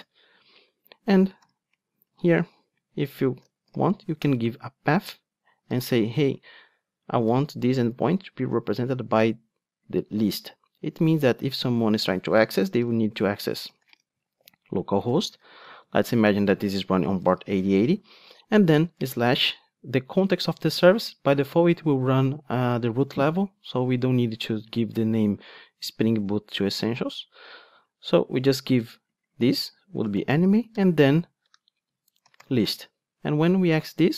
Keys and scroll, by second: 4.3 Return, 12.0 Tab.